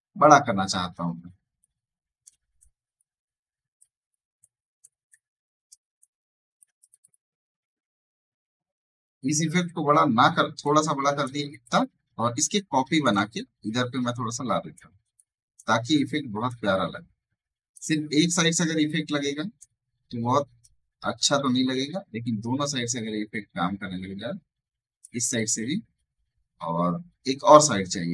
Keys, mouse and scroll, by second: 1.5 alt+shift+click, 2.5-5.9 ctrl+drag, 5.3-6.5 typing, 5.9 ctrl+click, 10.5-17.9 alt+shift+drag, 17.9 alt+scroll down 1, 18.8-20.5 drag, 20.5-25.1 alt+shift+drag.